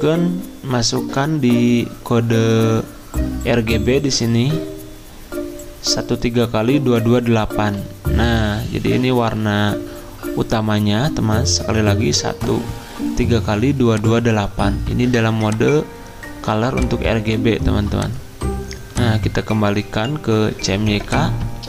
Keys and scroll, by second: 7.8 Return.